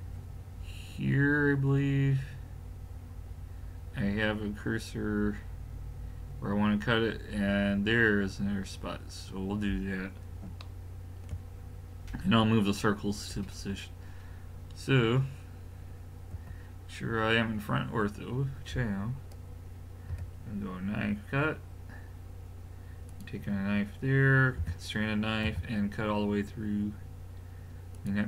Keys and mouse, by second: 16.3 KP_1, 20.1 k.